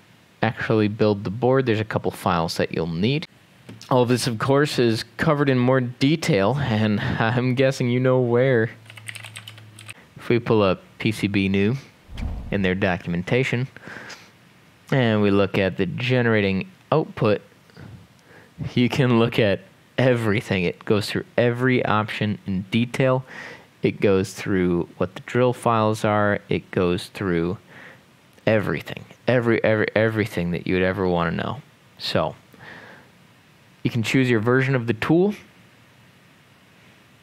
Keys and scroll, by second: 8.7-10.3 typing.